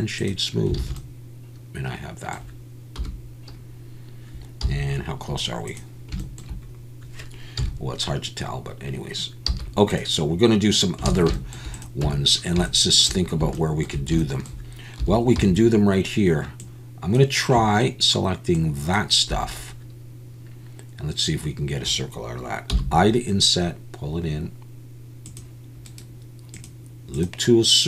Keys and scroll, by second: 0.8 alt+a, 3.0 /, 4.6 z, 7.6 KP_1, 9.5 z, 11.1 alt+a, 12.0 Tab, 15.0 3, 15.4 c, 19.3 Escape.